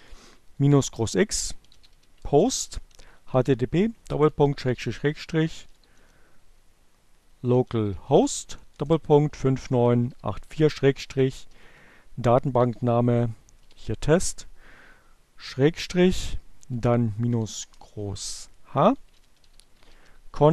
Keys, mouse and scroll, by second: 0.0-4.3 typing, 5.7-13.7 typing, 15.9-20.5 typing.